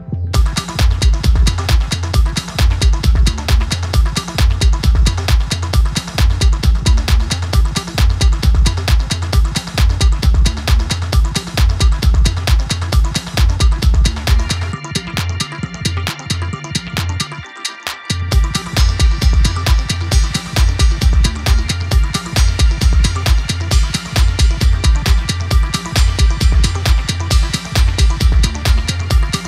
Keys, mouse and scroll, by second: 0.1-0.5 scroll up 2, 0.5 ctrl+r, 1.5 click, 1.8 scroll down 2, 1.9 middle click, 2.5 click, 3.2 scroll down 4, 3.4 middle click, 4.1 click, 4.4-4.7 scroll up 2, 4.7 ctrl+s, 4.9 scroll down 2, 5.1-5.6 scroll up 2, 5.6 click, 6.1 scroll up 1, 6.2 middle click, 6.9 click, 7.2-7.6 scroll up 1, 7.6 alt+shift+click, 8.4 e, 13.0 scroll up 2, 13.1 scroll down 1, 13.3-14.5 middle drag, 14.5 scroll up 1, 14.7 scroll down 1, 14.9 middle click, 15.3 click, 16.0 middle click, 16.4 click, 17.1 scroll up 2, 17.7 ctrl+r, 18.9 click, 19.1 scroll up 2, 19.5 ctrl+r, 21.0 click, 21.4 scroll down 1, 21.5 middle click, 22.3 scroll down 1, 22.5 middle click, 23.1 scroll up 1, 23.5 ctrl+r, 25.6 click, 26.2 scroll down 2, 26.4 scroll up 1, 26.6 middle click, 27.5 scroll down 1, 27.7 click, 27.9 right click, 28.7 click, 29.3 middle click.